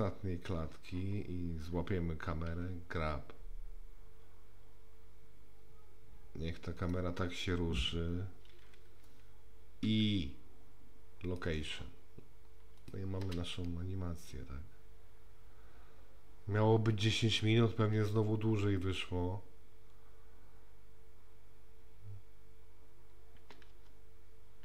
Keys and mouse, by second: 0.0 click, 2.5 g, 9.9 i, 12.9 click, 13.3 space.